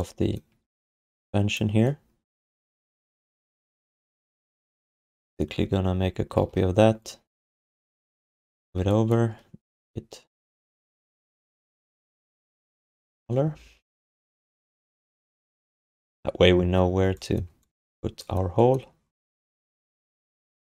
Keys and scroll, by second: 6.4 ctrl+d, 8.5 r.